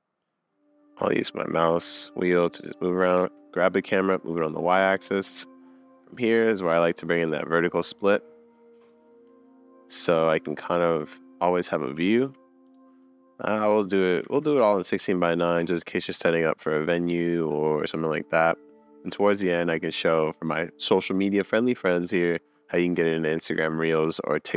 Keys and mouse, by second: 2.1-6.2 middle drag, 3.2 g, 7.3-10.2 middle drag, 11.9 `, 11.9 g, 12.2 y, 13.0-13.5 middle drag, 14.3 super+s, 14.6-15.0 middle drag, 15.4 click, 16.0 click.